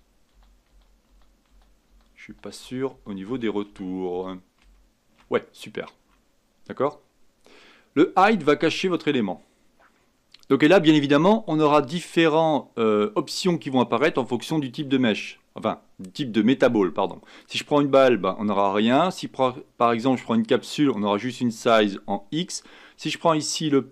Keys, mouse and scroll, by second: 0.3 ctrl+z, 0.7 ctrl+z, 1.1 ctrl+z, 1.5 ctrl+z, 1.9 ctrl+z, 2.2 ctrl+z, 2.6 ctrl+z, 2.9 ctrl+z, 3.3 ctrl+z, 3.7 ctrl+z, 4.1 ctrl+z, 4.6 ctrl+z, 8.9 click, 14.6-18.9 drag, 19.1-22.1 drag, 22.4-23.9 drag.